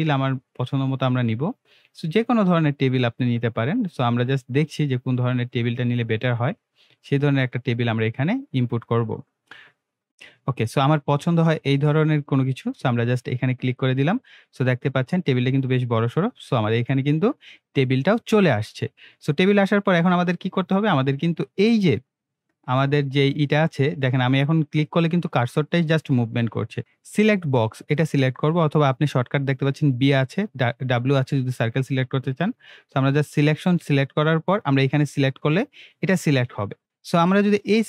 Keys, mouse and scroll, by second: 2.4 click, 5.8 click, 13.6 click, 15.1 scroll up 1, 15.5 scroll down 2, 18.3-19.5 middle click, 21.7 click, 26.8 right click, 31.9-32.5 right click, 33.1 click, 37.1 click.